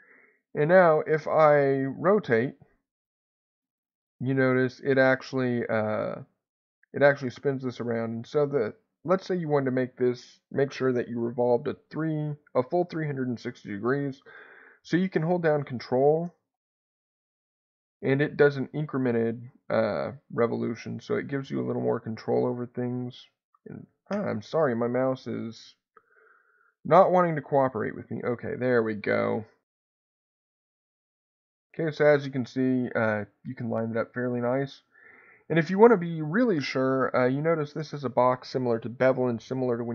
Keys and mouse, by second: 1.5-24.2 drag, 24.8 middle click, 26.8-35.3 drag.